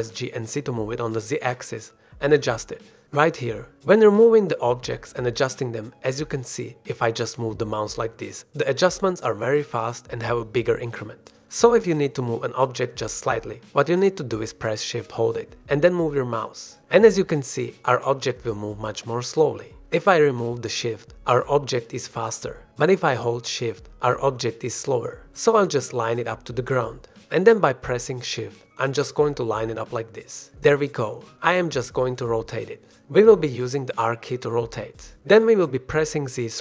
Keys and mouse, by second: 1.1 g, 2.6 g, 3.5 z, 34.1 shift+click, 34.5 r, 34.9 z.